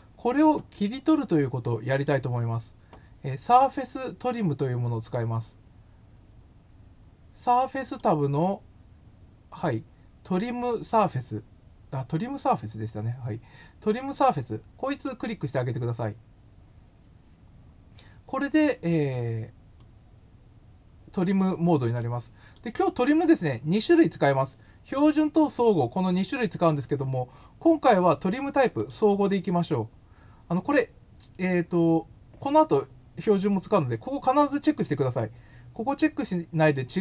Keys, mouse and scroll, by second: 1.9 click, 7.8 click, 14.9 click, 19.7-22.5 drag, 28.7 click.